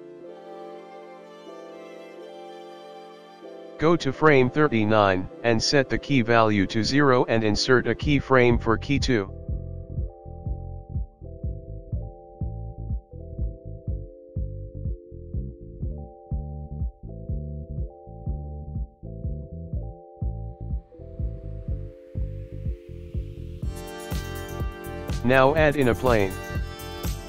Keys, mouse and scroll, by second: 0.4 click, 2.9 i, 4.5 click, 5.9 click, 8.1 click, 9.9 click, 10.6 space, 13.2 space, 13.8 click, 17.7 click, 19.7 space, 20.1 space, 20.5 click, 23.1 middle click, 23.6 shift+a, 26.9 s.